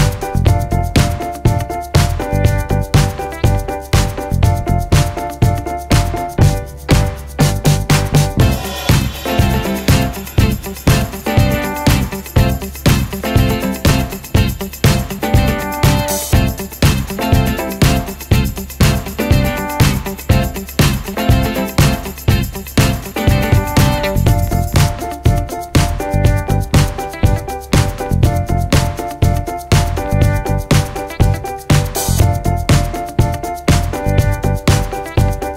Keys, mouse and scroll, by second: 13.6-16.6 drag, 27.6-35.5 drag.